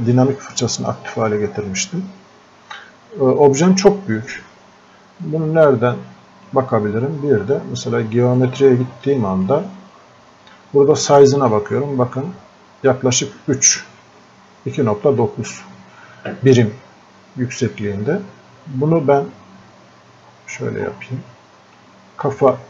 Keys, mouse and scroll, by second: 5.2-8.4 drag, 20.3 scroll up 1.